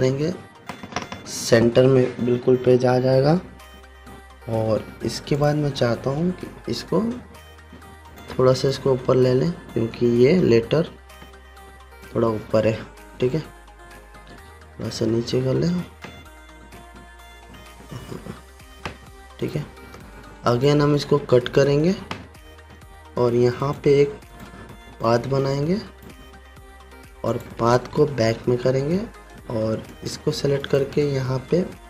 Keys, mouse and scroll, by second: 6.0 click, 8.7-12.7 drag, 15.9 click, 16.0 Down, 17.3 shift+Up, 18.0 Down, 20.0 click, 22.9 ctrl+x, 24.2 right click, 24.8-26.8 drag, 28.8 [, 30.5 shift+click, 31.1 right click.